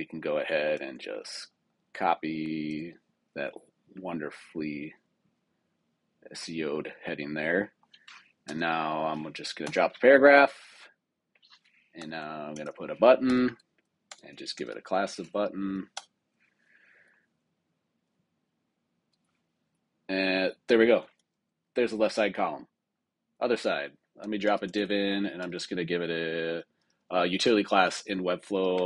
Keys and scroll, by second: 0.7 super+c, 2.6 super+v, 8.4 super+k, 9.6 Return, 11.9 super+k, 13.2 Return, 14.0 super+Return, 15.5 Down, 15.8 Return, 24.1 super+k, 24.6 Return, 25.3 super+Return.